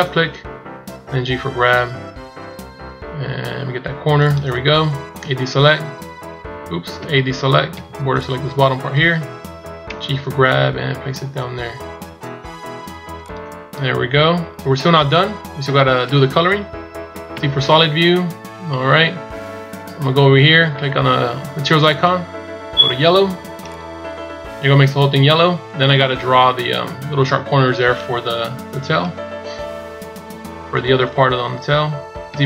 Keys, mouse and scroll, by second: 0.7 g, 6.9 a, 9.8 g, 13.7-14.7 shift+scroll down 13, 16.1 scroll down 1, 17.1 z, 17.7 scroll up 2, 18.2 scroll down 3, 21.6 click, 32.1 z.